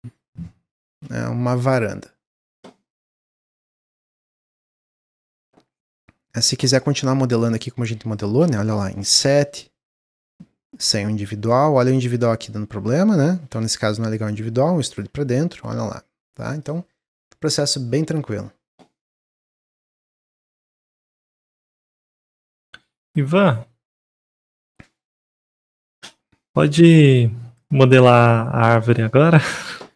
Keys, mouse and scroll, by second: 5.6 middle click, 5.9-6.8 scroll up 2, 6.8 click, 7.5 shift+click, 7.8 shift+click, 8.1-9.1 shift+drag, 11.4 click, 11.9 click, 12.2 click, 13.2 middle click, 13.8 e, 15.0 Tab, 15.3 scroll down 1, 15.6-16.5 middle drag, 16.5 drag, 16.9-20.9 middle drag.